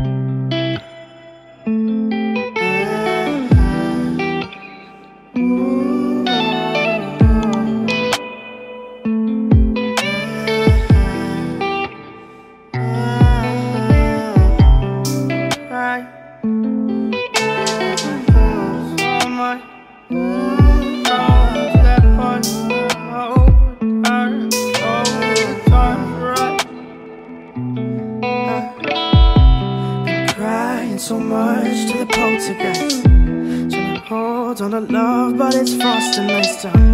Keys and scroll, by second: 2.2 ctrl+d, 6.0 ctrl+j, 10.0 ctrl+space, 18.8 ctrl+space, 24.7 ctrl+d, 32.1 ctrl+d, 32.2 ctrl+space.